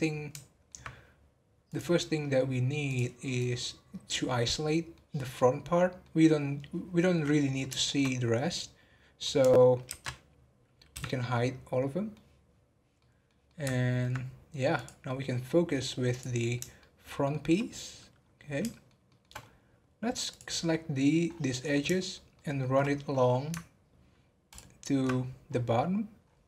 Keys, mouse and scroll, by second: 1.6-3.4 drag, 4.4 scroll up 1, 4.6-7.0 middle drag, 7.0-7.8 scroll down 2, 7.8-9.8 shift+middle drag, 9.8 ctrl+i, 11.3-14.7 middle drag, 14.7 click, 15.1-16.1 scroll up 3, 16.1 click, 16.8-18.1 shift+middle drag, 18.1 scroll up 4, 18.6 shift+middle click, 19.4-20.1 scroll up 6, 20.3 click, 20.6-21.0 scroll down 7, 21.3 scroll up 5, 21.9 shift+middle click, 22.8 scroll up 3, 24.4 ctrl+click, 25.5-25.9 scroll down 10, 26.2-26.4 scroll up 4.